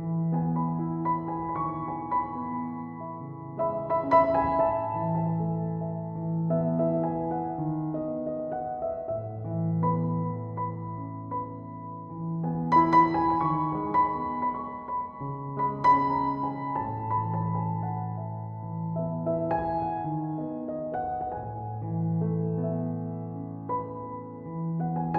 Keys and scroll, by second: 1.1-1.9 typing, 10.1-10.8 typing, 13.7 BackSpace.